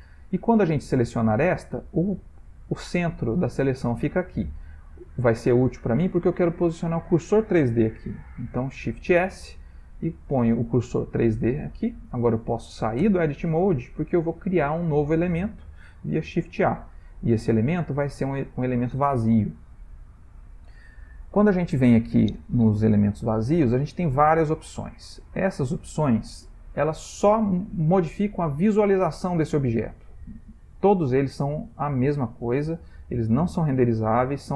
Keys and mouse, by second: 3.6 shift+middle click, 3.7 shift+middle click, 9.2 shift+s, 13.0 Tab, 16.3 shift+a.